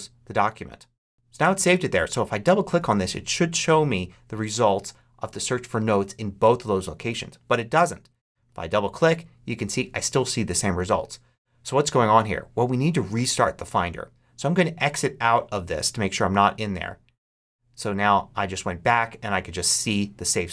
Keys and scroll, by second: 1.0 super+q.